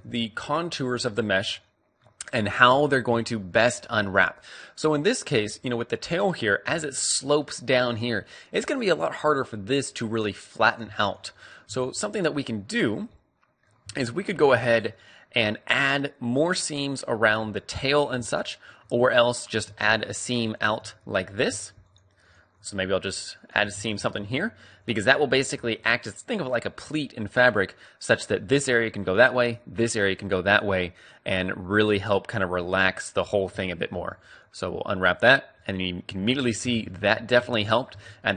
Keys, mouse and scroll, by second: 2.8-6.5 middle drag, 6.5-7.9 d, 6.9-8.7 drag, 8.1-9.8 right drag, 8.1 d, 8.8 d, 10.6-11.9 right drag, 11.9-13.4 middle drag, 13.7 a, 14.4-15.8 middle drag, 16.0 middle click, 17.1-22.7 middle drag, 22.7-25.0 right drag, 23.9 ctrl+e, 25.0 middle click, 25.5 middle click, 25.7-27.4 middle drag, 28.3-30.5 d, 28.6-31.7 drag, 31.4 right click, 31.7 middle click, 32.7-33.8 typing, 32.8-34.4 drag, 34.9 click, 35.6-37.5 middle drag, 36.1 KP_3, 36.5 Tab, 37.3 Tab, 37.5 click, 37.8 Tab.